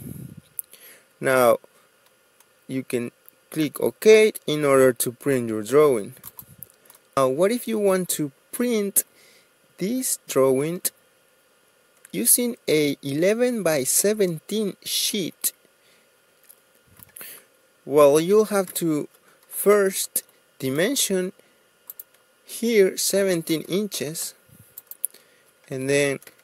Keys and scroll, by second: 0.0 Escape, 7.2 ctrl+z, 7.2 Delete, 16.9 Escape, 17.8-18.8 typing, 20.1 Return, 22.4-23.1 typing, 23.3 Return, 24.6 Escape, 25.7 ctrl+a.